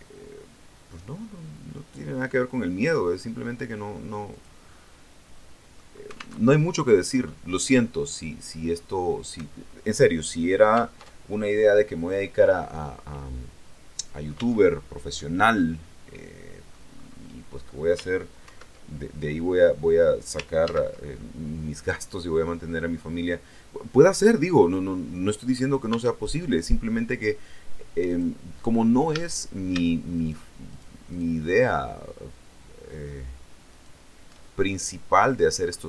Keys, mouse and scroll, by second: 4.2 click, 4.6-5.8 middle drag, 6.2 alt+Tab, 10.8 alt+Tab, 12.7-14.4 middle drag, 14.3 Tab, 14.4-15.0 scroll down 1, 15.0-16.8 middle drag, 16.8-17.3 scroll up 1, 18.3 ctrl+2, 20.5 ctrl+z, 21.0 ctrl+middle click, 21.2 ctrl+right click, 22.0-25.6 middle drag, 25.8 Tab, 26.3 middle click, 28.0 click, 29.0 a, 30.0 alt+shift+right click, 30.6 alt+shift+right click, 31.0 alt+shift+right click, 33.6 alt+shift+right click, 34.3-35.8 alt+shift+middle drag.